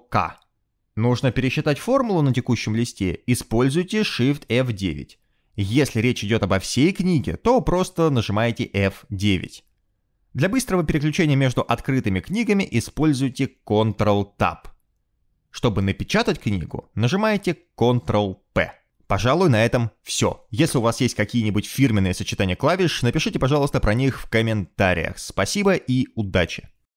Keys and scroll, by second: 3.9 shift+F9, 7.9 F9, 8.5 F9, 8.8 F9, 9.1 F9, 9.4 F9, 13.0 ctrl+Tab, 13.9 ctrl+Tab, 14.5 ctrl+Tab, 17.5 ctrl+p, 22.3 ctrl+p, 23.0 Escape.